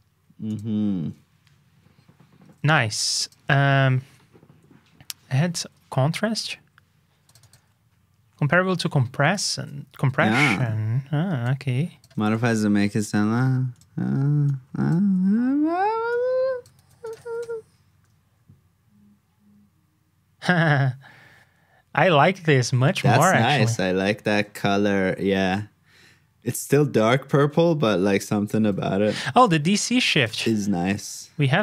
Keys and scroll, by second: 2.0 super+s, 2.4 super+Tab, 5.1 super+Tab, 9.5 super+c, 10.4 super+Tab, 15.0 super+v, 16.7 super+c, 17.2 super+v, 27.4 super+Tab, 30.4 super+c, 30.6 super+Tab.